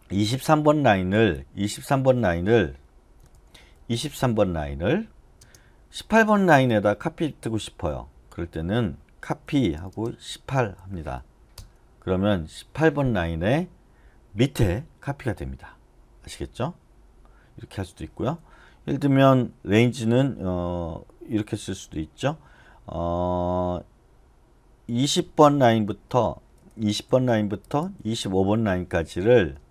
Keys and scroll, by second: 3.1-5.4 typing, 9.1-11.3 typing, 11.5 Return, 15.6 typing, 17.7 u, 19.8 typing, 25.0-26.7 typing, 29.5 space.